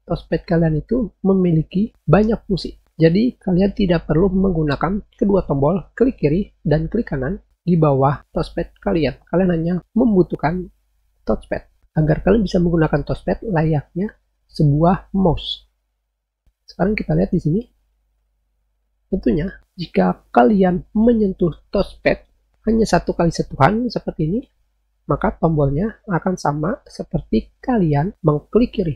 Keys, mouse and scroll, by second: 23.9 click.